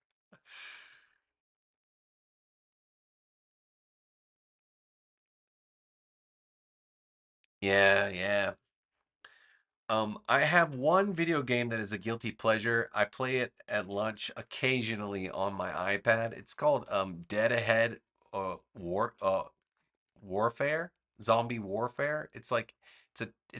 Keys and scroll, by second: 11.8 super+-, 13.5 super+-, 13.8 super+=, 15.7 space.